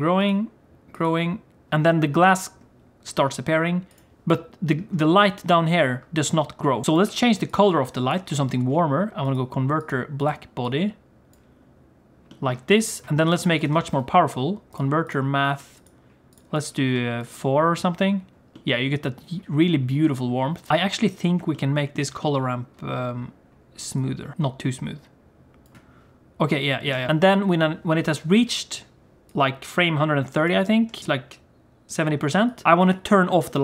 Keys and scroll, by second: 7.0 g, 8.5 shift+a, 13.1 g, 13.8 shift+a.